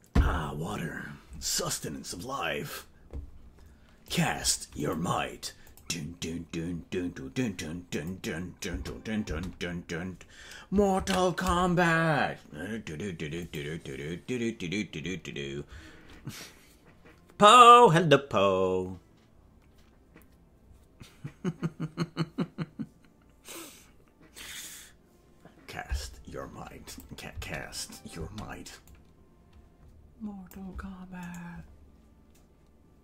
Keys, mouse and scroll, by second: 4.1 click, 4.9 click, 5.7 click, 8.0 click, 8.6 space, 13.4 ctrl+s, 13.6 click, 26.9 click, 27.3 space, 28.3 space, 28.9-30.6 drag, 31.5-33.0 right drag.